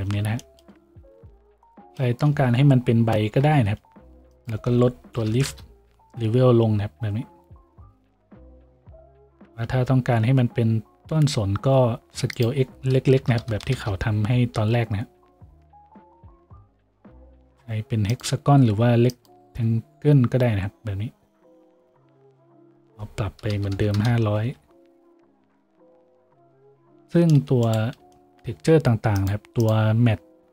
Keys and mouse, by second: 3.3 F6, 9.8 F6, 21.8 F6, 23.7 KP_0.